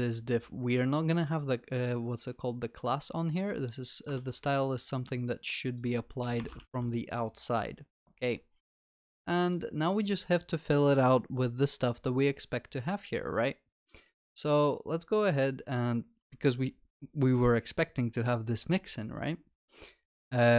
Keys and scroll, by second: 0.1 ctrl+c, 6.5 ctrl+v, 6.6 ctrl+s.